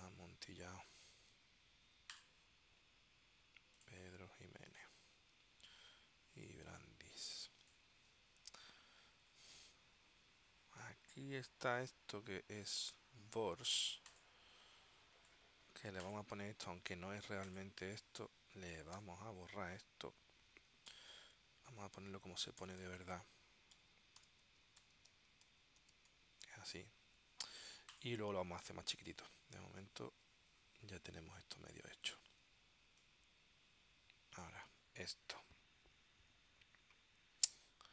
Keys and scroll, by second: 19.2 BackSpace, 20.2 Right, 21.0 shift+., 21.7 Right, 22.7 BackSpace, 23.9-26.7 typing.